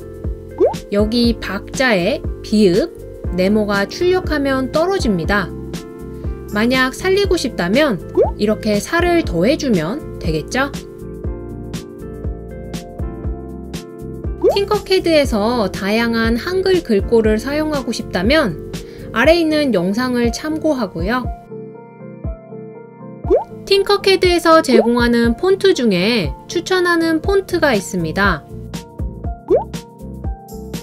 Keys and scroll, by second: 12.8 typing.